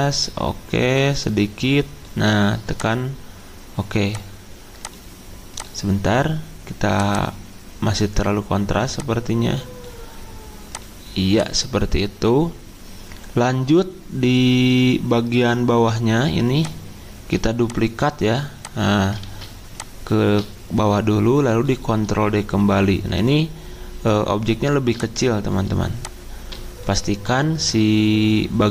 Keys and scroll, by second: 19.2 ctrl+z.